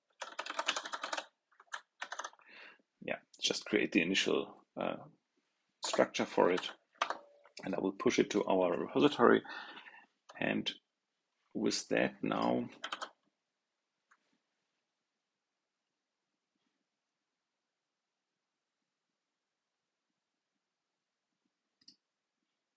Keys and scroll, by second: 12.8 super+r.